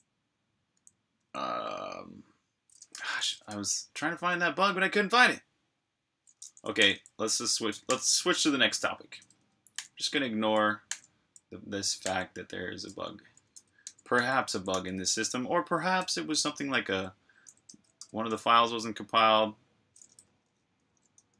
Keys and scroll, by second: 3.5 k, 5.7 typing, 6.7 super+j, 13.5 Escape, 13.5-15.1 typing, 16.6 Tab, 17.6 Tab, 17.9 Return, 21.0 super+].